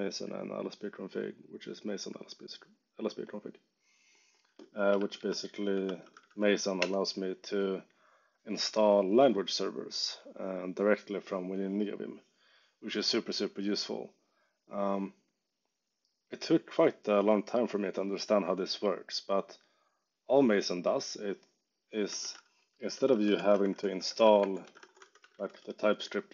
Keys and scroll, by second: 4.7-6.7 typing, 6.7 Return, 22.1 super+t, 22.6-25.6 typing.